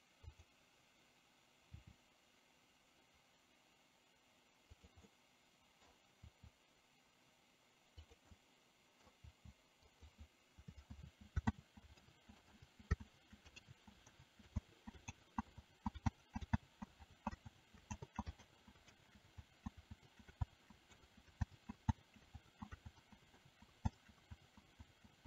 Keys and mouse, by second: 0.3 click, 1.9 r, 5.2-5.9 middle drag, 6.4 r, 8.4 middle click, 9.3 r, 11.1 ctrl+z, 12.2 ctrl+z, 12.8 ctrl+z, 13.2 ctrl+z, 13.8 ctrl+z, 14.3 ctrl+z, 24.1 ctrl+z, 25.1 ctrl+z.